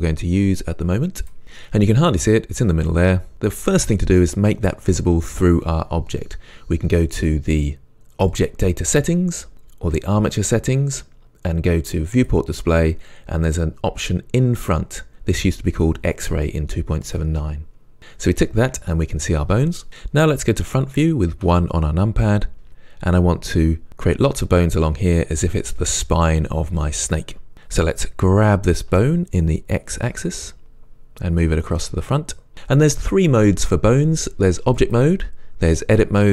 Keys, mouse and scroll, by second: 2.0 scroll up 1, 12.2-13.1 drag, 17.1 click, 21.5 KP_1, 22.7-23.2 scroll down 1, 28.9 g, 32.5 click, 34.8-36.3 drag.